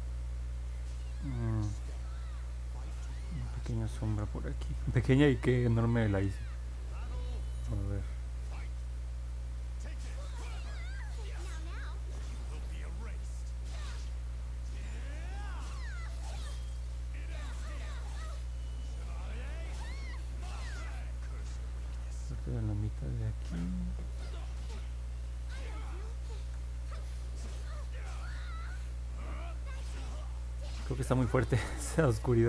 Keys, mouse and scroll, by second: 3.9 ctrl+z, 11.6-19.3 drag, 26.3 ctrl+z, 28.3 click.